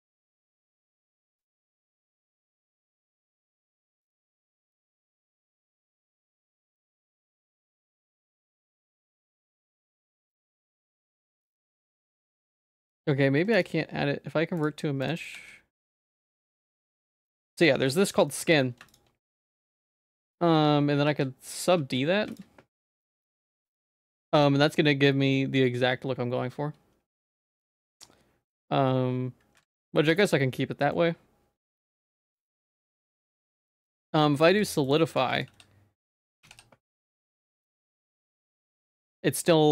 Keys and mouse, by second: 9.4 ctrl+z, 10.1 ctrl+s, 10.5-13.3 drag, 13.6-15.1 right drag, 15.1-17.3 drag, 18.3 middle click, 19.3 middle click, 19.7 ctrl+s, 20.0 middle click, 21.1 ctrl+2, 21.8 ctrl+1, 22.7 middle click, 24.5 middle click, 25.3 middle click, 29.6 ctrl+s, 30.6 middle click, 32.6 ctrl+s, 32.9 middle click, 34.4 click, 34.9 click, 35.4-37.0 drag, 38.0-39.7 drag.